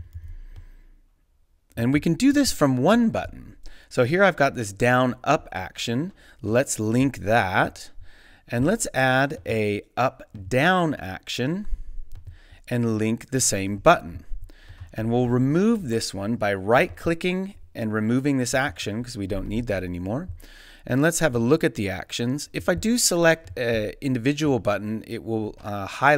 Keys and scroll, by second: 0.0 super+c, 0.2 super+v.